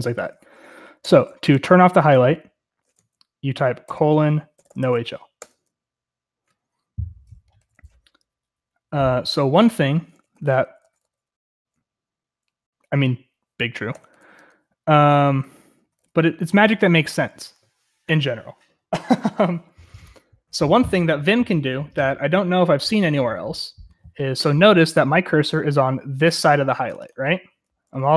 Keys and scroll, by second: 1.0 Escape, 1.5 k, 3.8-5.9 typing, 7.5-8.2 typing, 9.5-11.0 typing, 13.9-16.3 typing, 27.7-28.1 typing.